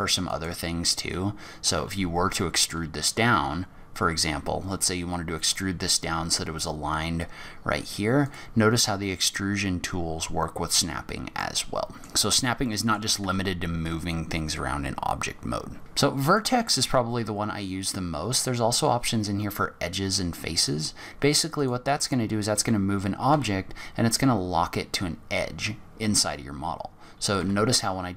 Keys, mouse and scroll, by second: 0.2 click, 1.7 e, 10.6-11.1 scroll down 8, 11.4 middle click, 12.6 middle click, 13.2 Tab, 15.8-16.1 scroll down 3, 16.0 scroll up 9, 16.2 click, 21.5 click, 23.3 g, 27.8-28.1 scroll up 5.